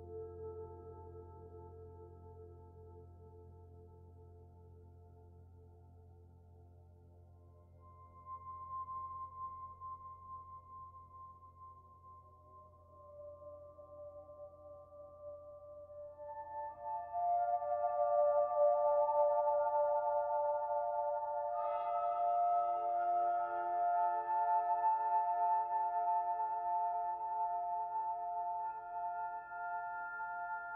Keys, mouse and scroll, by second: 1.5 click, 5.6 click, 14.2 click, 15.2 click, 18.6 click, 25.8 middle click, 27.3 middle click, 29.5 click, 30.4 middle click.